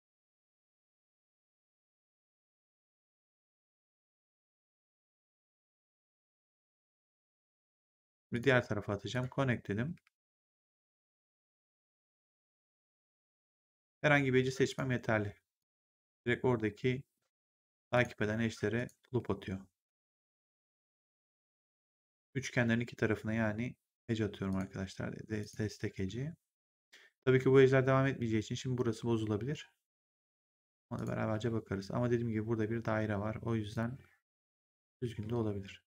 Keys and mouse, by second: 0.9 click, 1.9 w, 3.4 click, 4.7 w, 8.2 click, 9.9 w, 10.6 click, 13.2 click, 13.6 w, 14.6 click, 15.9 w, 17.9 click, 19.1 w, 20.3 click, 21.5 w, 24.4 click, 25.8 w, 30.1 click, 31.2 w, 33.6 click, 34.9 w.